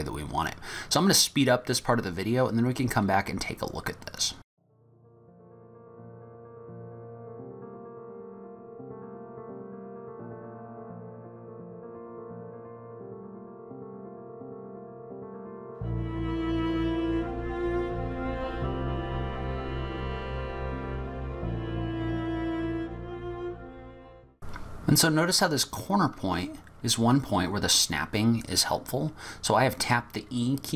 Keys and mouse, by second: 4.5 e, 5.0 e, 5.7 e, 6.3 e, 7.5-11.3 typing, 10.8 click, 12.0 click, 12.6-17.1 typing, 17.7 click, 18.1 click, 18.6 e, 20.0 e, 20.3 ctrl+z, 20.3 ctrl+z, 20.5 ctrl+y, 20.6 click, 20.8 g, 21.9 click, 22.0 e, 22.4 click, 22.7 e, 23.5 g.